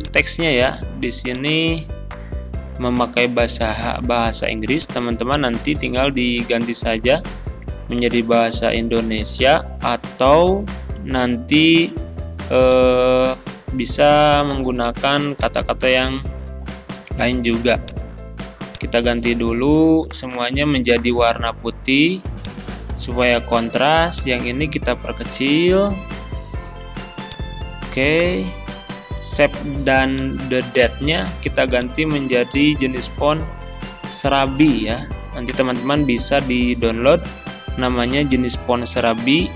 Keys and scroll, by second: 2.7 ctrl+c, 5.8 ctrl+v, 6.4 ctrl+a, 7.2 ctrl+e, 8.2 ctrl+], 9.4 ctrl+[, 14.4 b, 14.5 a, 14.6 h, 15.5 Return, 20.3 ctrl+a, 25.4 ctrl+[, 28.3 Return, 32.6 s, 34.3 r, 34.4 a, 35.6 Return.